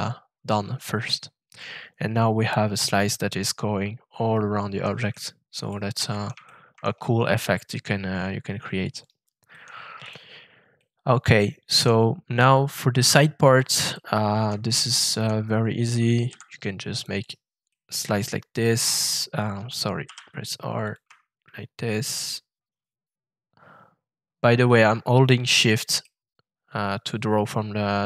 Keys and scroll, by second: 16.2 shift+f, 20.0 r.